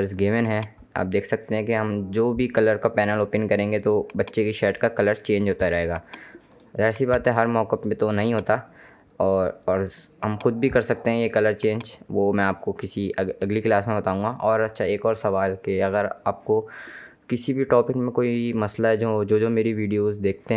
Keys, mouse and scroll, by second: 0.1 click, 0.9-2.2 scroll down 1, 3.8 click.